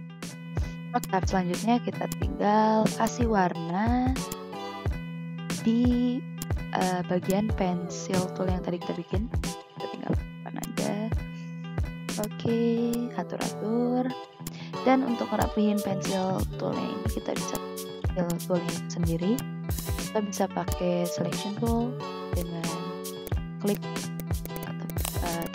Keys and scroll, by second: 2.7 i, 4.0 v, 4.9 i, 5.8 v, 8.1 i, 9.8 ctrl+shift+[, 11.3 ctrl+z, 11.7 v, 13.6 ctrl+z, 17.3 v, 18.6 ctrl+z, 22.3 v, 23.6 i.